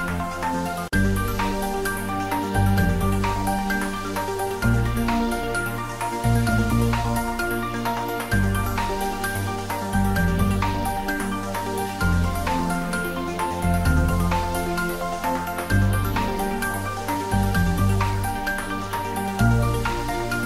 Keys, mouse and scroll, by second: 0.5 click, 2.0 shift+middle click, 2.5-3.5 typing, 4.5 Down, 5.0 click, 5.4 ctrl+s, 7.0 click, 7.6 ctrl+middle click, 8.5 ctrl+middle click, 9.1 ctrl+s, 9.7 shift+middle click, 10.1 click, 10.7 shift+click, 11.3 click, 12.3 shift+click.